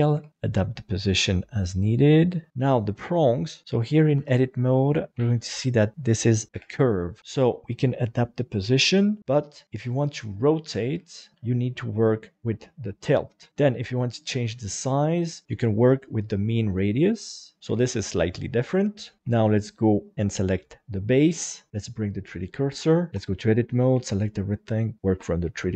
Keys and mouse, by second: 0.1 g, 0.3 middle click, 1.4 click, 2.5 Tab, 3.3 right click, 3.6 KP_7, 4.1 Tab, 4.6 middle click, 5.1 a, 5.5 middle click, 6.5 KP_7, 7.6 g, 9.6 r, 10.6 Escape, 11.8-13.5 drag, 14.3-17.6 drag, 17.7 g, 18.4 click, 19.0 middle click, 19.2 shift+Tab, 19.5 right click, 21.7 Tab, 21.7 shift+s, 23.1 Tab, 23.9 a, 24.7 click.